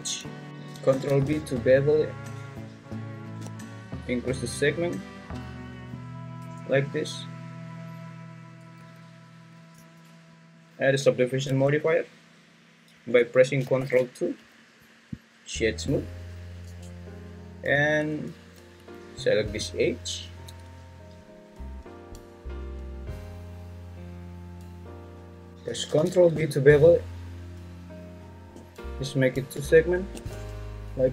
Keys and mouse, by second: 0.5 Escape, 0.9 ctrl+b, 6.4 Tab, 8.8 `, 9.8 Tab, 11.4 Tab, 13.8 ctrl+2, 15.5 right click, 16.7 Tab, 18.7 2, 20.9 ctrl+click, 25.9 ctrl+b, 30.3 Tab.